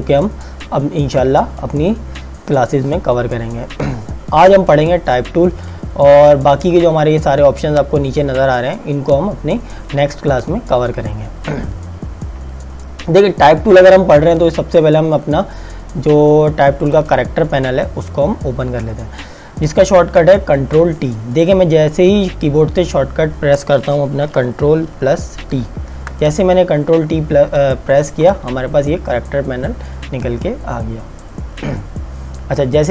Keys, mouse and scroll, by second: 16.9 click, 25.5 ctrl+t.